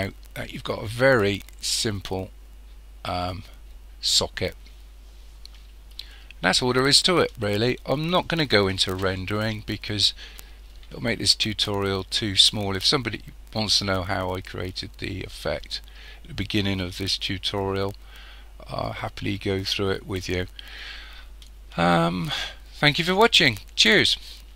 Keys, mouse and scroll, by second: 6.4-9.2 scroll down 2.